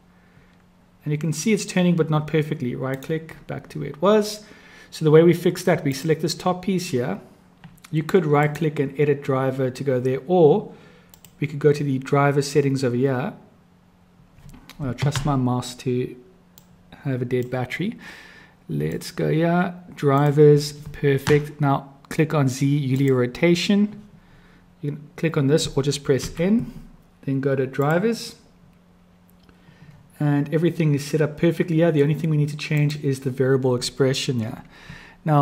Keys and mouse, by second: 5.8 click, 8.4-9.9 drag, 11.2 click, 16.5-17.5 drag, 18.9-20.3 drag, 23.0 click, 26.1 n, 27.7 click, 32.8 click.